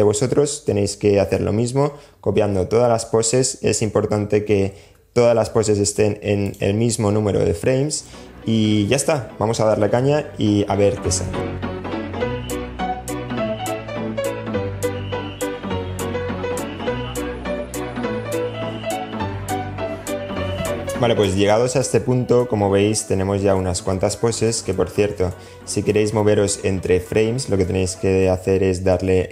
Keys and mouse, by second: 5.7 click, 11.6 click, 12.0 click, 12.3 super+z, 12.3 click, 12.5 click, 12.7 a, 12.7 i, 12.8 click, 13.8 super+s, 14.0 click, 14.2 Down, 14.2 Up, 14.2 i, 14.3 click, 14.7 Down, 14.9 click, 14.9 h, 15.1 Down, 15.1 Up, 15.9 Down, 15.9 Up, 16.1 Up, 16.1 Down, 16.8 super+z, 17.1 Down, 17.1 Up, 17.1 a, 17.4 click, 17.6 a, 17.7 click, 17.9 click, 18.2 click, 18.3 Up, 18.4 Up, 18.5 Down, 18.6 a, 18.7 click, 19.3 middle click, 19.6 middle click, 19.6 a, 19.6 i, 19.8 Down, 19.8 Up, 19.8-22.8 middle drag, 20.3 i, 22.1 Down, 22.4 Down, 22.6 Down, 22.8 Down, 22.9 Down, 23.0 Down, 23.5 Up, 23.7 Up.